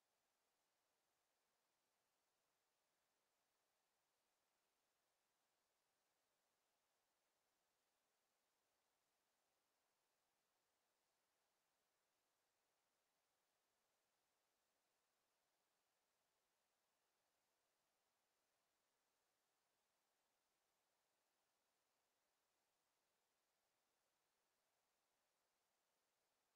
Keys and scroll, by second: 4.9 5, 5.2 0.